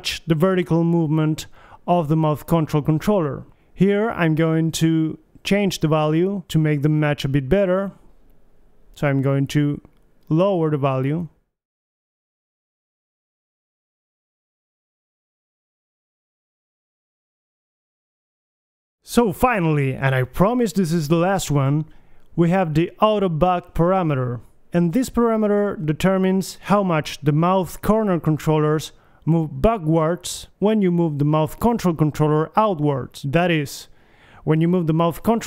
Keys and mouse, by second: 0.1 click, 2.4 g, 4.5 g, 6.5-9.8 drag, 7.9 BackSpace, 8.2 BackSpace, 9.8 BackSpace, 10.2 BackSpace, 10.2 KP_5, 12.0 g, 17.6 g, 18.7 click, 19.3 alt+g, 19.3 KP_3, 21.0 alt+g, 21.1 KP_1, 24.3-29.9 middle drag, 29.9 KP_1, 30.2 g, 32.7 click.